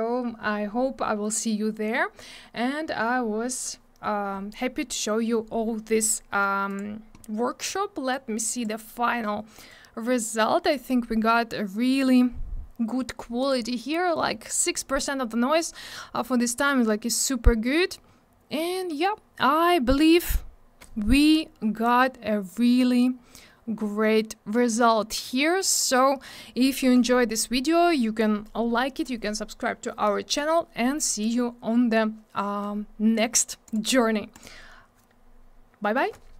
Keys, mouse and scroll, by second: 6.8 click, 8.1 click, 9.7 click, 11.7 scroll up 1, 13.3 click, 13.4 click, 15.5 click, 21.7-22.1 scroll down 1, 23.4 scroll up 1, 26.3 scroll down 1, 31.6 scroll down 1, 32.4-32.7 scroll up 1, 33.6 click, 34.3 click, 36.0-36.3 scroll down 1.